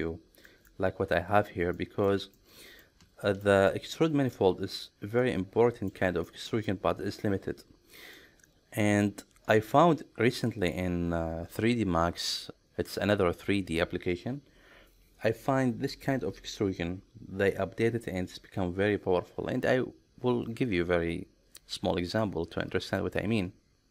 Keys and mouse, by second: 0.5 middle click, 1.8 middle click, 2.4 middle click, 3.2 shift+middle click, 3.7 middle click, 5.2 middle click, 6.3 shift+middle click, 6.8-8.2 middle drag, 9.6-10.8 middle drag.